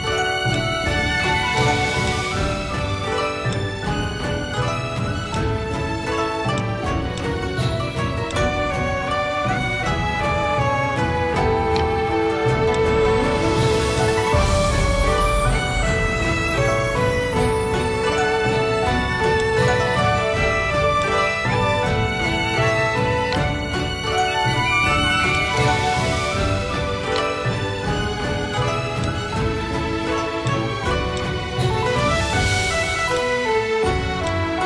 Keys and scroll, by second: 1.5 v, 5.8 space, 9.5 v, 11.0 space, 21.3 Down, 24.8 v.